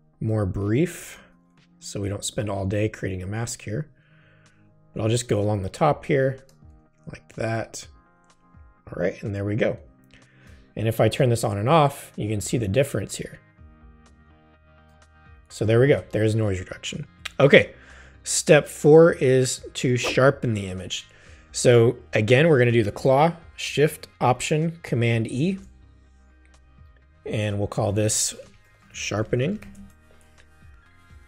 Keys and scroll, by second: 0.3 space, 6.1 space, 15.6 super+0, 25.3 alt+shift+super+e, 28.3-30.1 typing.